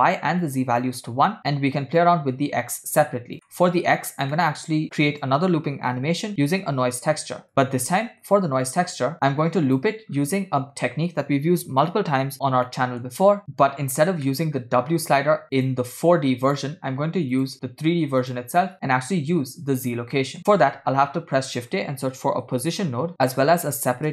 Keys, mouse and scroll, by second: 0.5 click, 2.0-3.3 drag, 3.6 middle click, 4.1 scroll down 3, 4.4 middle click, 5.0 shift+a, 8.7-9.1 drag, 9.5 click, 10.3-11.6 scroll up 2, 12.6 scroll down 2, 12.7 middle click, 14.4 middle click, 14.7-15.5 scroll up 1, 15.6-16.7 drag, 17.4-18.4 drag, 20.2 middle click, 20.6 shift+a.